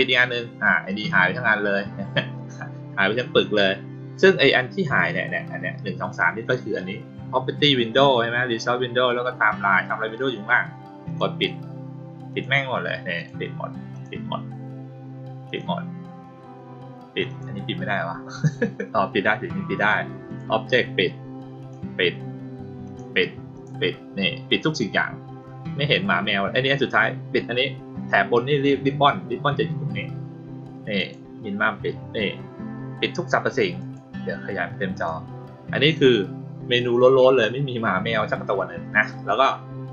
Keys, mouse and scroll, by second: 11.0 click, 12.2 click, 13.1 click, 13.9 click, 15.4 click, 17.2 click, 20.2 click, 21.5 click, 22.8 click, 23.5 click, 30.9 click, 33.7 click, 34.9 click.